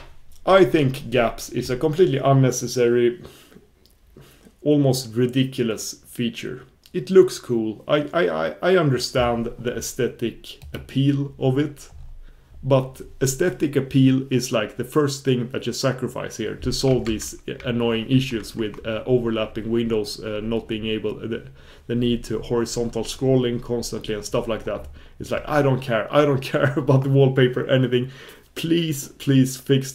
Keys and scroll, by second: 10.7 super+f, 18.4 super+1.